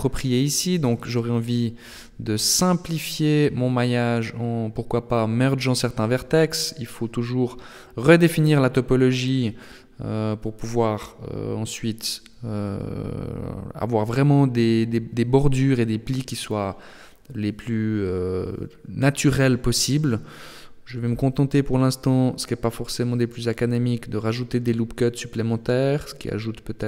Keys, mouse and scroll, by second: 0.6 right click, 2.0 scroll up 3, 6.7 right click, 7.7 shift+right click, 8.8 shift+right click, 9.6 b, 10.8 b, 14.0 scroll down 3, 15.8 ctrl+r, 20.9 ctrl+r, 25.1 ctrl+r.